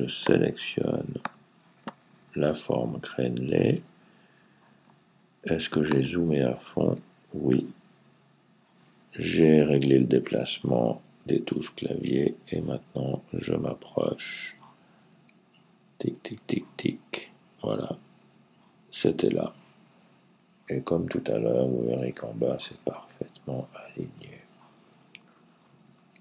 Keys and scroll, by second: 11.8 Left, 12.2 Left, 12.4 Left, 12.9 Left, 12.9-13.5 Left, 13.9 Left, 15.3 Left, 16.6 Left, 18.4 Right.